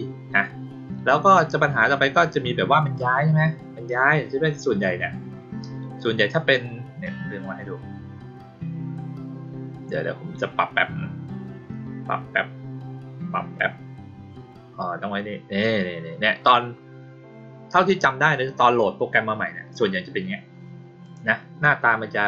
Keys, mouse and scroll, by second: 5.6-15.6 drag, 21.0 click.